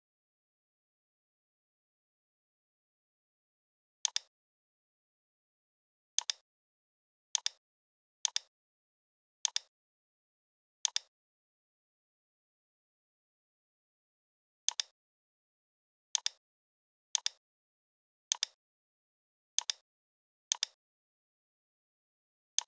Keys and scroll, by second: 2.2 i, 21.1 l.